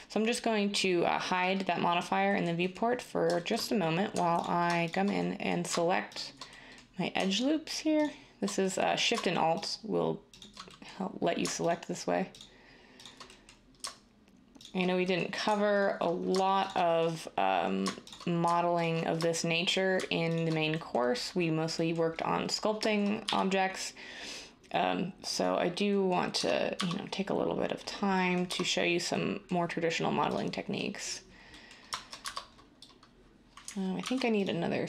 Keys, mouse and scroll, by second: 23.2 x, 26.3 Tab, 26.7 Tab, 28.4 Tab, 32.2 Tab, 34.0 ctrl+r.